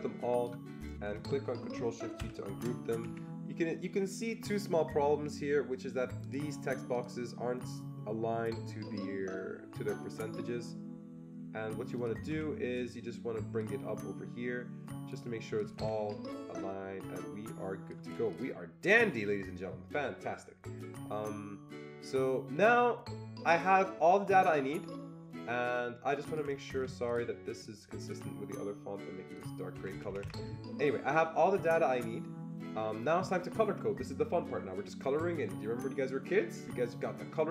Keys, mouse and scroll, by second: 2.1 ctrl+shift+g, 3.0 Escape, 6.2 click, 6.2 Escape, 6.2 ctrl+shift+g, 6.2 click, 6.9 click, 11.9 click, 11.9 click, 12.5 Escape, 13.6-16.6 shift+drag, 16.2 Escape, 16.6-26.2 shift+drag, 26.2 shift+click, 26.4 Escape, 27.1 ctrl+click, 27.7 ctrl+double click, 28.2 ctrl+click, 29.3 ctrl+click, 29.4 ctrl+click, 29.7 Escape, 29.9 Escape, 30.1 Escape, 30.2 Escape.